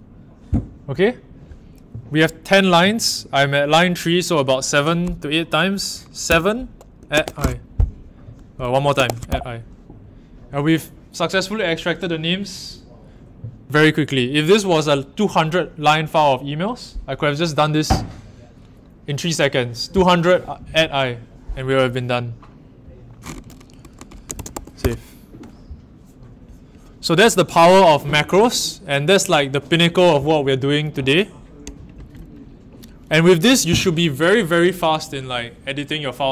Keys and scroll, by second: 6.3-9.7 typing, 24.4 shift+w, 24.7 Return.